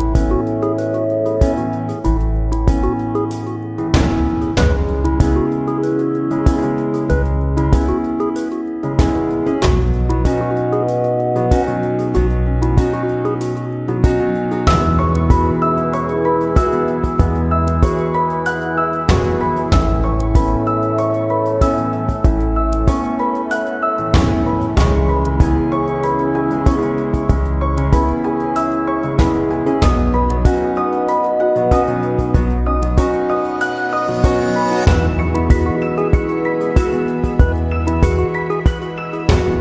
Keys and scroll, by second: 13.8 ctrl+=, 18.8 ctrl+=, 19.4 ctrl+-, 28.3 ctrl+-, 37.2 ctrl+-, 37.5 ctrl+0, 38.8 ctrl+=.